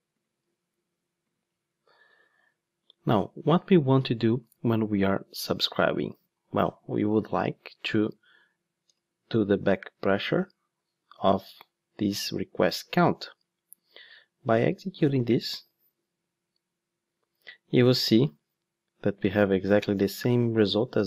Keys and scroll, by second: 8.9 Return, 15.5 ctrl+shift+d.